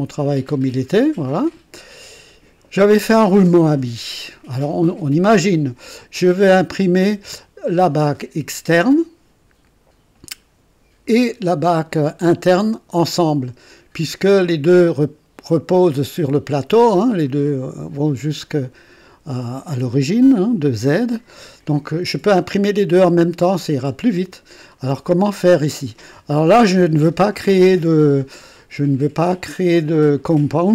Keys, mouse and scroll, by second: 1.5 click, 5.8-7.0 drag, 8.7 click, 14.5-16.7 drag, 18.4-19.8 drag, 21.3-22.1 drag.